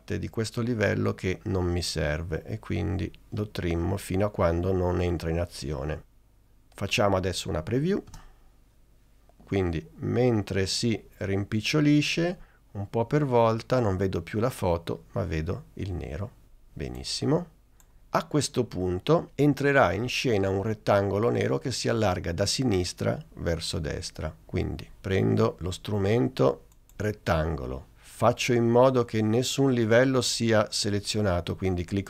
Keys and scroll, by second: 8.2 space.